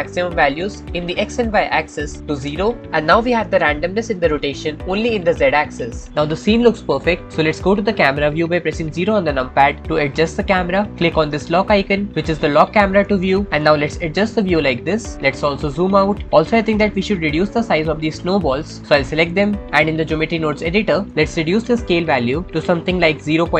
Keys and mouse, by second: 1.1-2.5 drag, 9.6 KP_0, 13.5 middle click, 15.5 middle click.